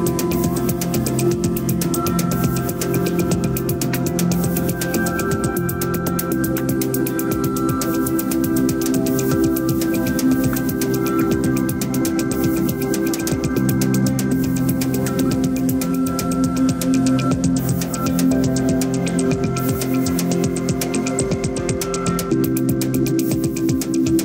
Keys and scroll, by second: 6.2 shift+5, 10.2 shift+F5.